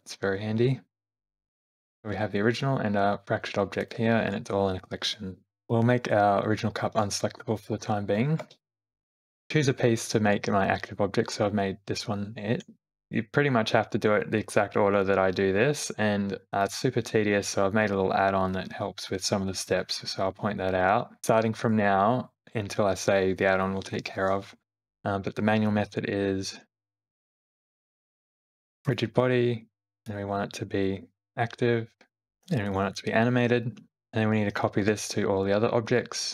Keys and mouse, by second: 1.8 g, 7.0 click, 7.7 Left, 8.2 Left, 8.4 Right, 8.8 Left, 27.8 click, 30.0-31.2 drag, 34.8 q.